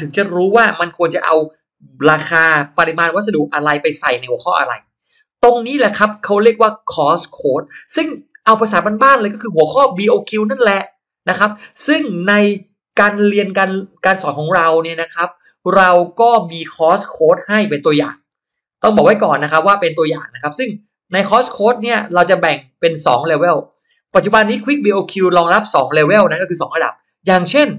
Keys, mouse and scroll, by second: 15.6 shift+right click, 19.9 ctrl+scroll up 1, 20.1 ctrl+middle click, 20.3 ctrl+middle click, 23.0-23.3 scroll up 2.